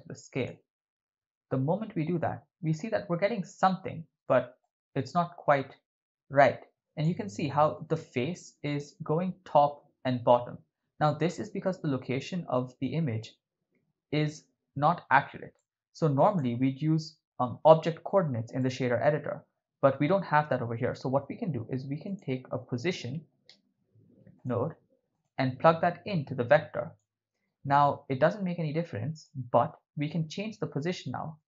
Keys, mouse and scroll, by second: 2.2-3.2 ctrl+middle drag, 4.7-5.2 shift+middle drag, 6.7 click, 15.6 middle click, 16.3 click, 18.6 middle click, 21.1 shift+a, 26.1-27.0 drag, 28.3-29.3 drag.